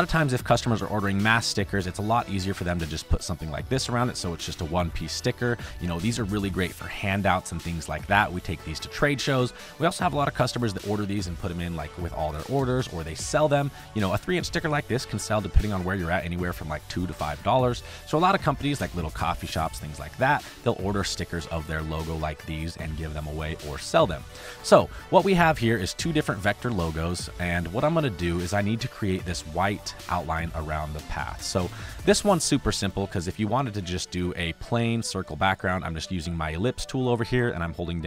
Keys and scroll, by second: 0.9 space, 1.8 space, 5.3 space, 7.1 space, 9.4 space, 14.5 space, 20.4 space, 23.9 space, 26.6 space, 27.1 space, 27.7 space, 30.3 ctrl+z, 30.9 space, 31.9 space, 32.9 space.